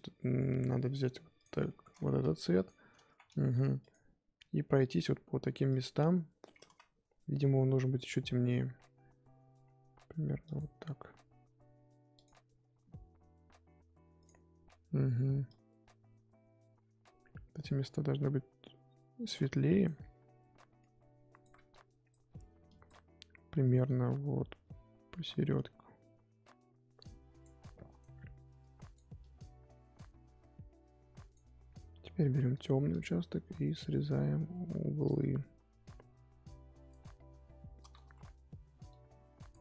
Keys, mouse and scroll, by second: 1.4 click, 1.7 shift+middle click, 1.9-2.4 scroll up 1, 2.5 click, 3.0 ctrl+z, 3.4 f, 5.6 click, 6.6 ctrl+z, 10.4-32.6 drag, 33.9-38.0 drag, 38.0 ctrl+z, 38.8-39.6 drag.